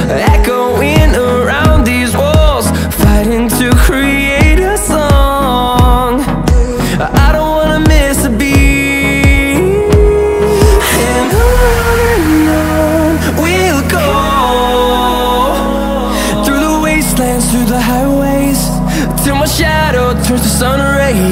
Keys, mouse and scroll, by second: 0.5 click, 2.8-4.2 typing, 5.2 click, 6.2-7.4 typing, 8.3 click, 9.4 typing, 10.8-11.6 typing, 12.2 click, 14.7 typing, 15.4 click, 16.2-17.6 typing, 18.6 click, 19.5-20.6 typing.